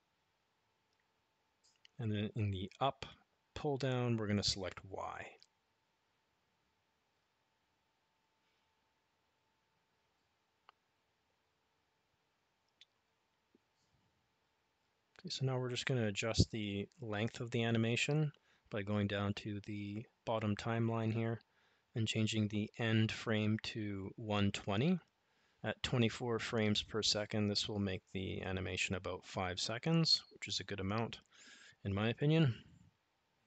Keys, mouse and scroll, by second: 3.1-5.5 drag, 20.6-28.5 drag.